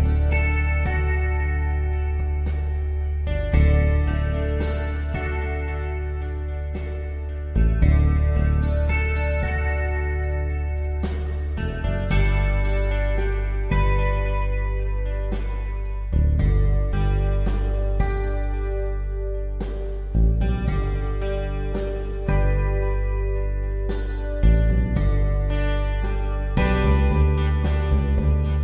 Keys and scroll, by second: 1.6 ctrl+t, 4.9 Return, 10.6 space, 13.2 ctrl+t, 17.5 Return, 25.2 b.